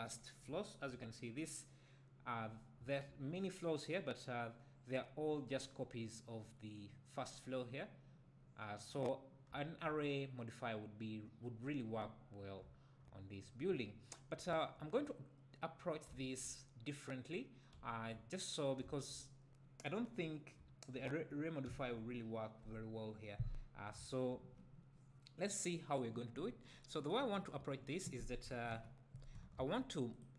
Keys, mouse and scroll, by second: 0.1 scroll up 1, 0.5 `, 2.4-2.8 scroll up 1, 2.8 `, 9.1-9.5 scroll down 2, 9.5 `, 13.7-14.0 scroll up 2, 14.0-14.4 scroll down 2, 14.4 `, 17.3-17.7 scroll down 2, 17.7 `, 20.1-20.5 scroll up 2, 20.5 `, 27.6 `, 28.7 KP_1, 29.6 shift+a.